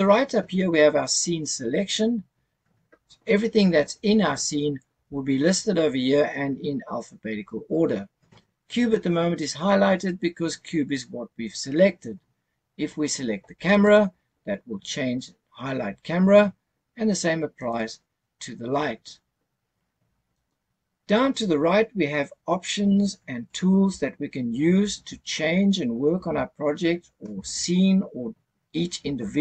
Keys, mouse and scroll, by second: 2.3-3.2 scroll down 3, 3.2-5.3 scroll down 1, 13.7 click, 17.6 click, 20.3 click.